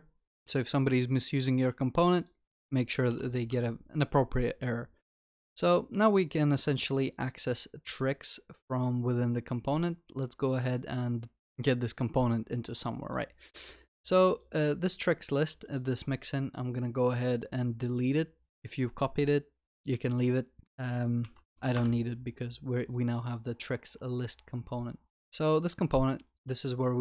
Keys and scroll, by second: 3.4 ctrl+s, 21.3 Delete, 25.2 ctrl+s.